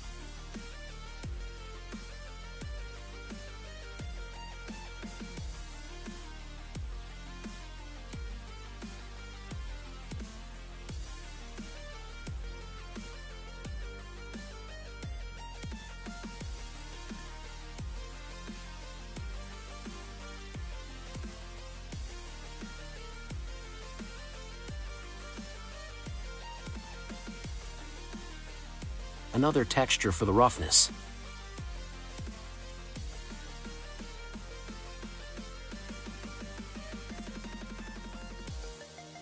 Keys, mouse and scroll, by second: 1.1 click, 2.1 click, 2.7-4.4 middle drag, 4.4 shift+d, 5.8 shift+d, 7.3-8.6 middle drag, 8.6-9.4 scroll down 2, 9.4 click, 10.7 g, 12.2 click, 12.6-13.5 scroll up 1, 13.5-14.6 scroll up 5, 14.6 click, 16.7 click, 18.8-19.3 scroll up 1, 19.3-21.3 middle drag, 21.3-23.4 drag, 24.5-27.5 middle drag, 28.3 drag, 34.8-35.7 scroll up 4, 35.7 scroll down 2, 37.0-39.2 middle drag.